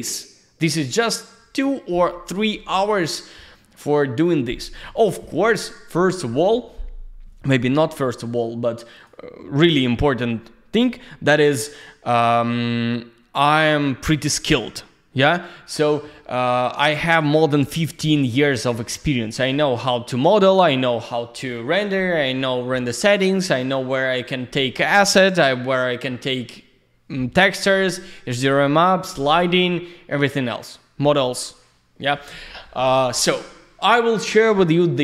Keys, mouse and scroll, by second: 8.9 click, 11.6 click.